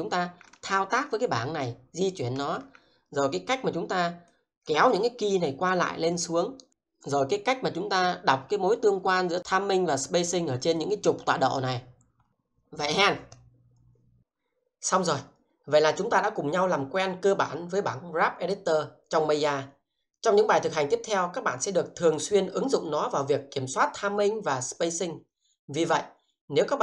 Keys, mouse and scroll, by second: 0.5 alt+middle click, 4.3 click, 5.9 scroll down 1, 6.2 shift+middle click, 8.3-9.0 scroll up 1, 9.0-9.4 scroll down 1, 10.7 click, 11.7 scroll down 1.